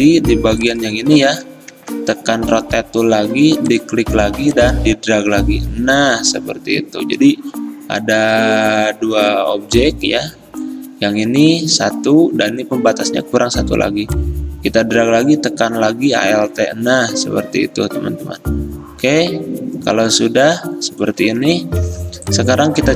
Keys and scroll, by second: 1.8 r, 22.0 v.